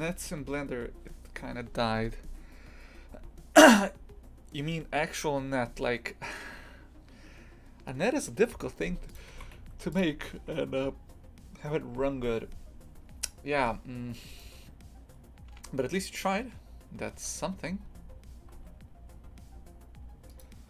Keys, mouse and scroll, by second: 9.2 click, 9.3 shift+f, 10.1 a, 14.3 right click, 17.1 e.